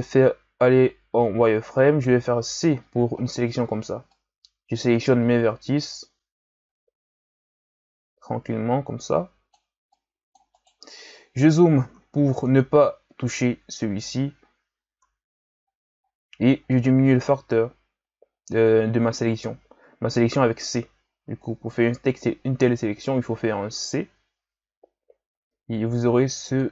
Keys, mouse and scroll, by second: 0.3 z, 1.8-2.4 scroll up 1, 2.4 c, 11.0-11.5 scroll up 4, 11.5-11.9 scroll down 2, 11.9-12.5 scroll up 3, 12.5-14.4 scroll down 2, 14.4-14.9 scroll up 1, 14.9 c.